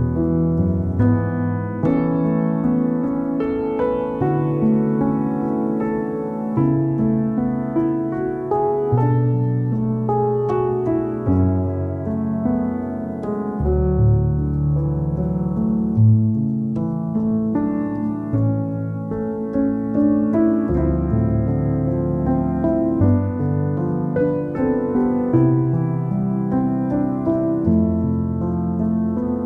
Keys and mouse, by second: 0.5 click, 0.8 i, 1.7 e, 2.3 s, 3.0 ctrl+z, 3.2 ctrl+z, 3.9 e, 4.7 s, 6.3 alt+middle click, 6.8 Tab, 6.8 click, 7.5 alt+middle click, 7.8 click, 8.3 shift+middle click, 8.4 ctrl+z, 8.5 ctrl+z, 8.6 ctrl+z, 8.7 ctrl+z, 8.8 ctrl+z, 9.2 ctrl+z, 9.8 alt+middle click, 10.2 g, 11.5 i, 12.4 g, 14.6 alt+middle click, 15.4 2, 15.5 click, 15.7 g, 16.6 alt+middle click, 17.0 Tab, 17.1 Tab, 17.4 KP_1, 17.5 Tab, 17.7 alt+middle click, 19.3 shift+click, 19.7 alt+middle click, 20.3 KP_1, 20.8 Tab, 20.9 click, 21.4 Tab, 21.4 click, 21.9 click, 22.4 click, 22.9 x, 23.2 Tab, 23.4 click, 24.4 Tab, 24.9 Tab, 25.2 click, 25.7 Tab, 25.8 alt+middle click, 26.1 KP_3, 26.7 click, 26.9-28.0 alt+middle drag, 28.1 KP_1, 28.3 KP_3, 28.6 e.